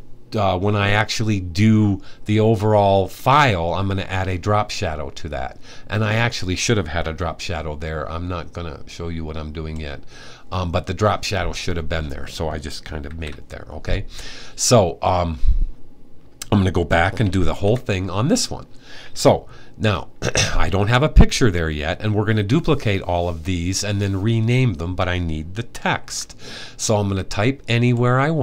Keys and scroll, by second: 12.7 super+s, 17.1 super+`, 25.7 t.